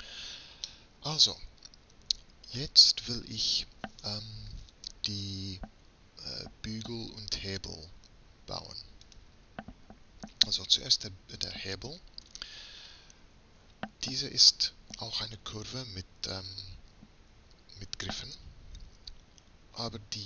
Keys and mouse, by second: 9.8 click, 12.4 Tab.